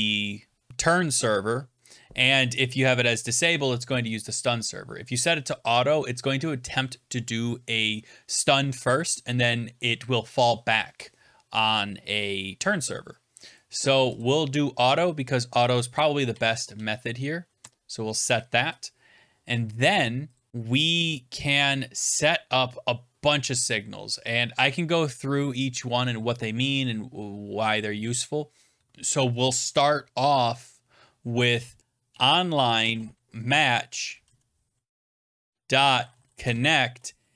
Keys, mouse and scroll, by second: 4.2 Down, 14.1 click, 15.5 click, 16.0-17.1 typing, 17.5 Tab, 18.6 Return, 20.3 click, 20.5 scroll down 2, 21.2-21.5 scroll down 1, 22.7 scroll, 25.5 click, 25.9 scroll, 30.1 Return, 31.8-36.8 typing.